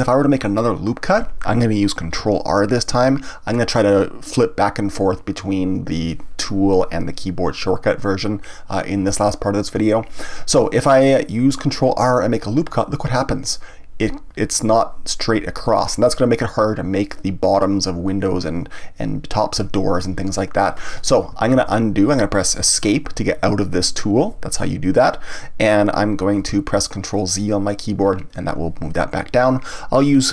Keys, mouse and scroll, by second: 2.9 ctrl+r, 26.5 ctrl+z.